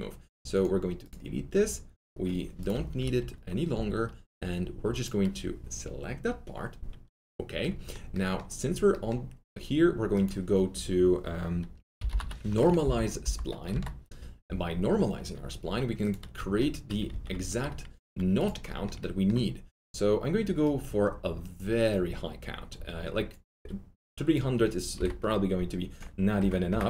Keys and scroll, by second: 2.6-4.2 typing, 7.5 F3, 7.5 F4, 11.7-13.6 typing, 17.1 alt+q, 24.9 KP_3, 25.0 KP_0, 26.3 KP_0, 26.6 Return.